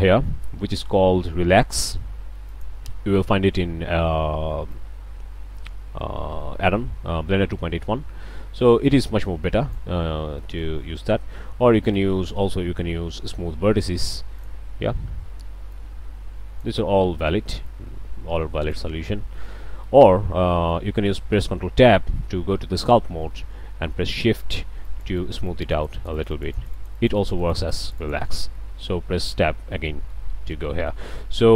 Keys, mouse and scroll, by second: 2.5 click, 4.7-9.9 drag, 10.4-10.8 drag, 11.0 ctrl+z, 11.8-12.3 drag, 14.4 click, 15.7-16.8 drag, 17.7-18.9 drag, 19.8 ctrl+z, 21.6 ctrl+Tab, 24.4 shift+click, 24.9-28.6 shift+drag, 29.4 Tab, 30.3 alt+a.